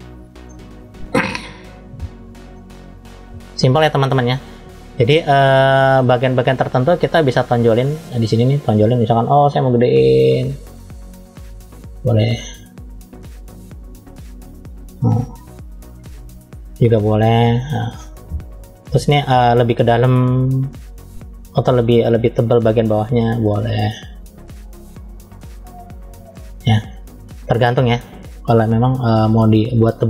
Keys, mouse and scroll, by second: 0.4 middle click, 1.7 scroll up 1, 2.4 middle click, 3.6 middle click, 4.7-5.2 scroll up 2, 5.5 middle click, 7.6 click, 9.2 f, 11.7 click, 16.4-16.8 scroll down 2, 16.9 middle click, 19.0 middle click, 19.4-20.0 scroll up 1, 20.1 shift+middle click, 20.9 scroll up 2, 21.5 middle click, 22.6 click, 26.7 middle click, 27.9 click, 29.2-30.0 middle drag.